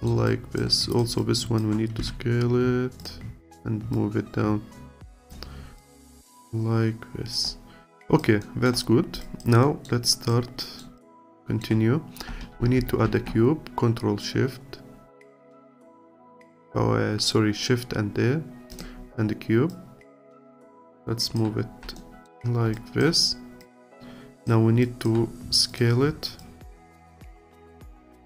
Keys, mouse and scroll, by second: 0.3 alt+click, 1.2 alt+click, 2.0 s, 3.9 click, 5.2 click, 5.5 scroll down 2, 5.8-7.5 alt+drag, 7.5-8.0 scroll down 1, 8.0 alt+click, 8.4 alt+middle click, 8.9 scroll up 2, 9.2 alt+click, 9.6 alt+middle click, 10.0 alt+click, 10.6 alt+middle click, 11.0 alt+click, 11.4-13.1 alt+middle drag, 13.1 shift+a, 19.7 click, 20.7 alt+click, 21.6-22.0 scroll up 2, 22.0 alt+middle click, 22.7 alt+click, 24.8-26.5 alt+drag, 27.4-28.2 alt+drag.